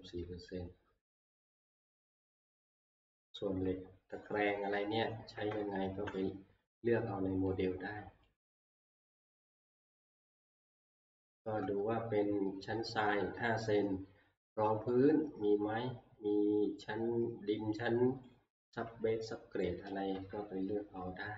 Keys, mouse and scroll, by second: 0.6 ctrl+scroll, 3.4 click, 6.9 click, 7.3 click, 11.0 click, 11.7 ctrl+scroll, 18.3 click, 20.1 alt+Tab.